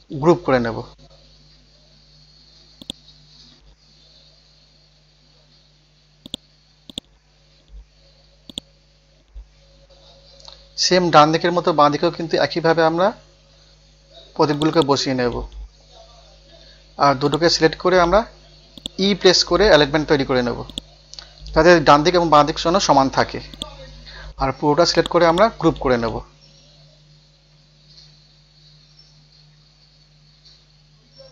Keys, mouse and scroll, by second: 2.8 click, 3.3-3.9 scroll down 1, 5.1-5.4 scroll up 1, 6.2 click, 6.9 right click, 7.4 scroll up 1, 8.5-10.5 drag, 11.2 Right, 12.0 Up, 12.2 Up, 12.7 scroll down 1, 14.5 click, 14.9 click, 15.5 scroll up 1, 17.2 shift+click, 18.4 shift+e, 18.8 click, 19.4 scroll down 1, 19.9-20.2 scroll up 1, 23.5 right click, 25.0 click, 25.9 scroll up 1, 26.7 scroll down 1, 27.8 scroll up 1, 29.2 scroll down 1, 30.5 scroll up 1, 31.1 scroll down 1.